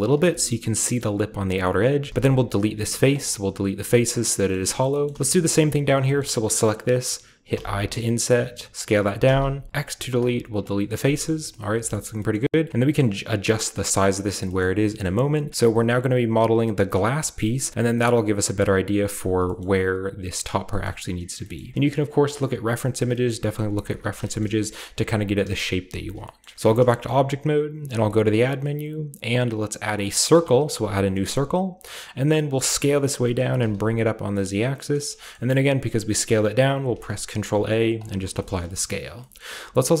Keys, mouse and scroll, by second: 0.0 click, 0.3 shift+middle click, 0.5-1.9 shift+scroll up 2, 1.0 shift+middle click, 2.1 x, 3.1 click, 3.9-4.5 scroll down 1, 4.3 shift+middle click, 5.0-5.5 scroll up 2, 5.1 middle click, 5.4 shift+middle click, 5.7 right click, 7.5 typing, 8.7-10.8 drag, 9.2 typing, 10.8-12.2 scroll down 3, 12.2-13.7 shift+scroll up 2, 13.9 middle click, 14.5-16.3 scroll up 1, 14.5 shift+middle click, 15.0-16.7 shift+middle drag, 19.4-21.3 shift+middle drag, 21.5-23.0 middle drag, 23.2 middle click, 23.5 middle click, 23.8 alt+h, 23.9-26.0 scroll down 3, 24.2 shift+middle click, 24.5 a, 25.0 alt+shift+middle click, 26.5 Tab, 27.8 shift+a, 30.2 click, 30.8-31.3 scroll down 1, 31.3-31.9 middle drag, 31.7 scroll up 1, 32.1 scroll down 2, 32.4 s, 33.3 click, 33.4 g, 33.5 z, 34.9-35.8 shift+drag, 35.2-35.8 shift+scroll up 2, 36.7 ctrl+scroll up 1, 36.8 ctrl+a, 37.9-39.2 drag, 38.3-39.9 shift+scroll up 1, 39.2-40.0 shift+middle drag, 39.9 shift+scroll up 1.